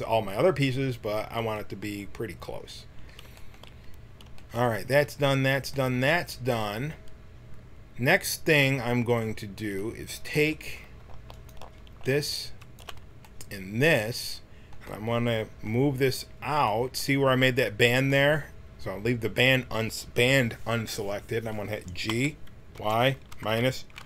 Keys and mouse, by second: 10.3 a, 11.3-13.2 right drag, 13.2 middle click, 13.8 click, 22.0 g.